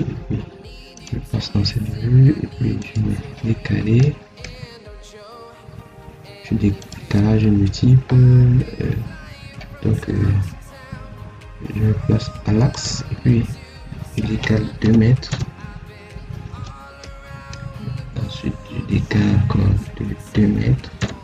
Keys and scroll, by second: 14.7 2, 20.1 2.